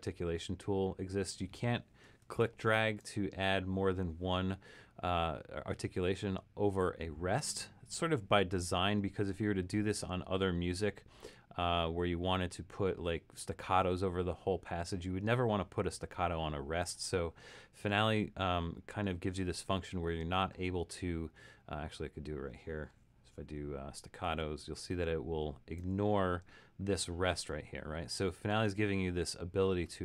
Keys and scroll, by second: 2.1-3.4 typing, 23.9-25.9 typing.